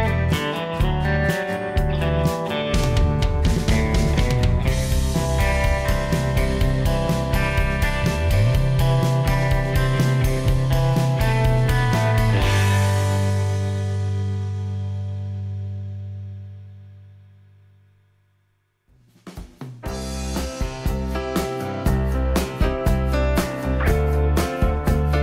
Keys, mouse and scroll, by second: 6.9 m.